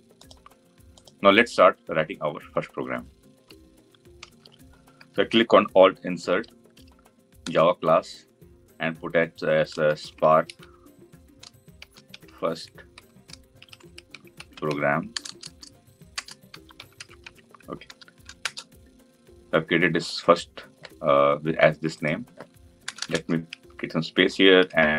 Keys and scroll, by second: 6.1 alt+Insert.